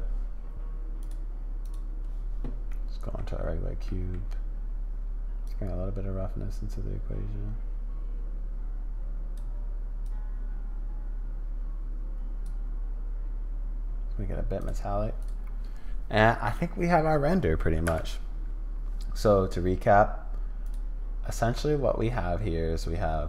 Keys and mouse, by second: 1.0 click, 1.6 click, 2.7 middle click, 3.9 middle click, 5.5-9.4 drag, 10.1-12.5 drag, 14.6 click, 15.2 click, 17.8 n.